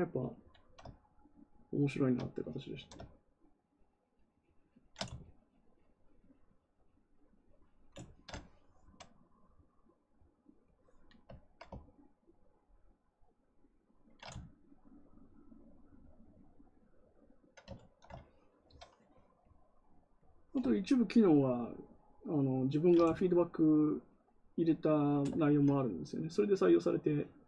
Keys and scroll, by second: 2.6 ctrl+z.